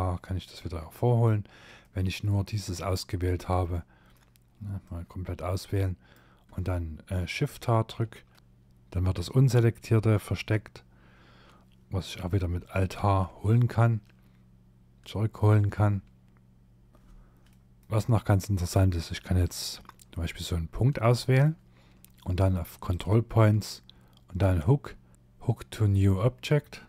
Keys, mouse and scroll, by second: 0.8 middle click, 1.7 click, 2.8 middle click, 3.9 click, 7.1 shift+h, 16.9 middle click, 17.1-17.8 scroll up 5, 18.5 click, 19.1 middle click, 22.0 click, 26.6 scroll down 2.